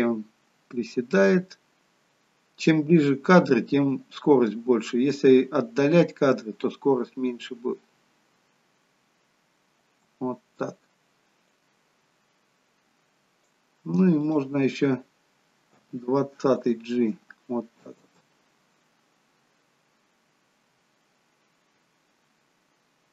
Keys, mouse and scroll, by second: 10.1 space, 11.6 click, 14.3 click, 15.9 g, 18.1 space.